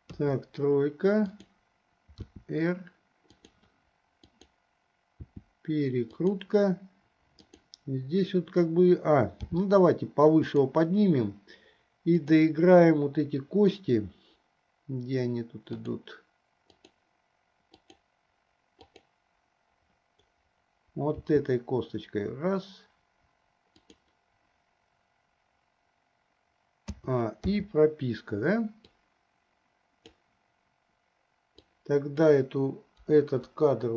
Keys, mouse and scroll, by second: 0.2 KP_3, 1.6 click, 2.5 r, 4.5 click, 5.5 r, 7.7 click, 9.8 g, 12.4 click, 17.0 click, 18.1 click, 19.1 drag, 21.5 r, 27.1 a, 27.7 i, 29.3-30.5 drag, 31.8-32.3 drag, 33.3 Delete.